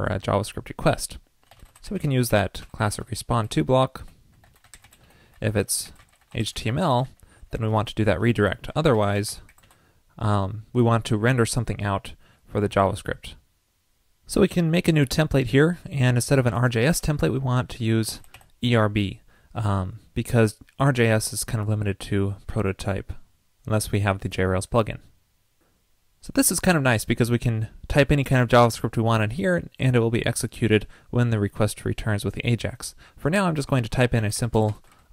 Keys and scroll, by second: 7.6 super+v, 8.4 super+Return, 14.9 alt+super+Down, 16.6 alt+shift+Left.